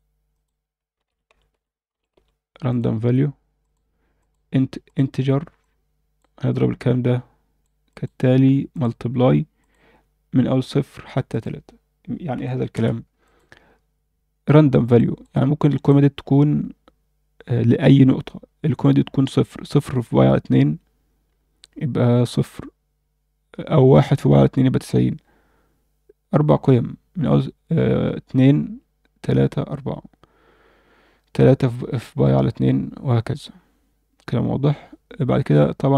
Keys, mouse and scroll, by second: 4.2-4.9 drag, 5.6-6.2 drag, 6.5-7.6 drag, 7.9-8.8 drag, 9.6-11.1 drag, 11.3-12.7 drag, 13.3 click, 14.9 click, 15.6 click, 15.9 click, 18.6 scroll up 2, 35.6 scroll down 2.